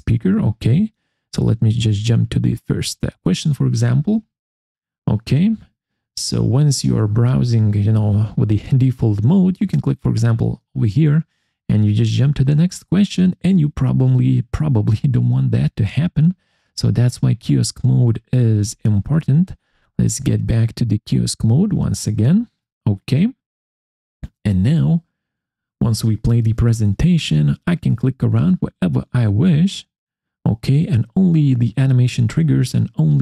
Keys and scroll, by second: 18.6 Escape.